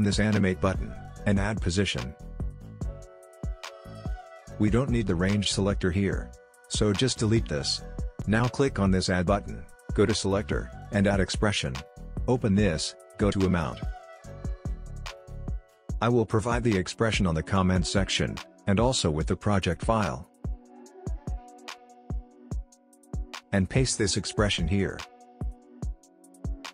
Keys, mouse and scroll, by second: 1.1 click, 3.4 click, 9.4 click, 13.4-21.9 drag, 21.9 ctrl+c, 22.7 click, 24.7 ctrl+v, 26.5-26.7 drag.